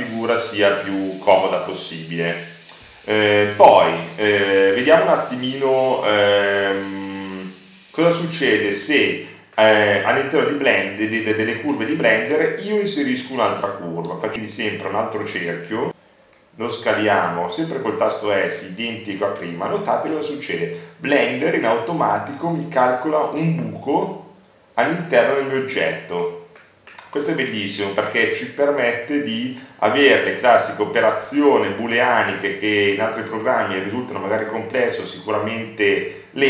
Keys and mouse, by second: 4.9-9.4 drag, 10.2 right click, 14.3 shift+a, 17.6 s, 19.4-20.4 drag, 24.4 middle click, 25.6 middle click, 27.3 middle click, 29.3 shift+d.